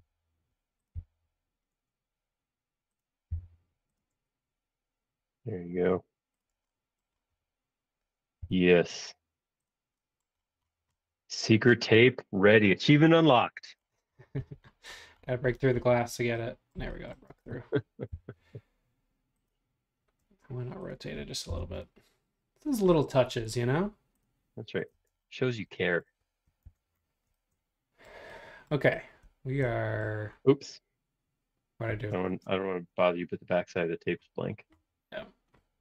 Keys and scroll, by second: 0.0-0.4 typing, 1.0 Left, 6.5 space, 8.5 m, 8.9 Up, 17.4 space, 18.1 m, 20.2 space, 21.5 m, 24.9 space, 26.7 shift+z, 32.4 space.